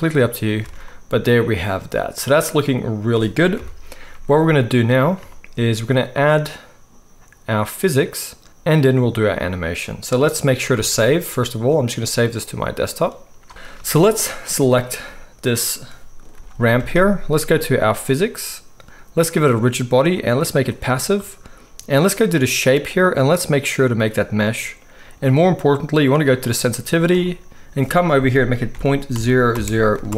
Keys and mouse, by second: 0.6 alt+a, 3.5 KP_1, 4.1 z, 10.8 ctrl+s, 14.8-18.0 middle drag, 16.3 g, 18.0 click, 18.1-19.3 middle drag, 19.3-30.1 drag.